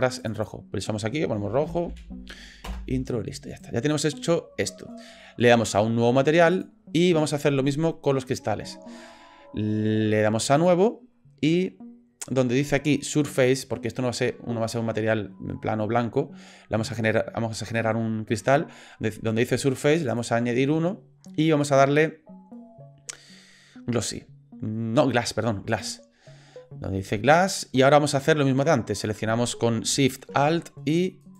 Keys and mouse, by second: 0.2 click, 0.4-3.0 drag, 1.9 o, 3.5 click, 4.0 middle click, 6.5 click, 10.6 click, 20.1-25.9 drag, 28.2 middle click, 31.2 alt+shift+click.